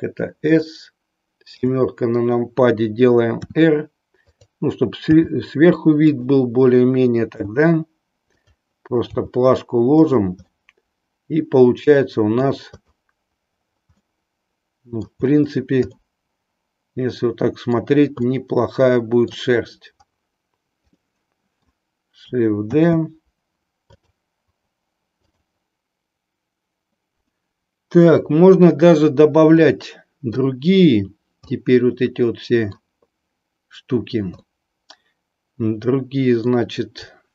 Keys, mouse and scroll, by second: 0.5 click, 1.6 KP_7, 3.3 r, 4.2 click, 5.1 g, 6.1 click, 7.3 r, 8.4 click, 9.1 g, 10.5-12.5 middle drag, 12.8 click, 14.0-15.2 middle drag, 16.0-17.8 middle drag, 18.1-19.2 middle drag, 21.0-21.9 middle drag, 22.9 shift+d, 23.9 click, 25.1 click, 29.6-30.5 middle drag, 31.5-32.9 middle drag, 34.5-36.6 middle drag.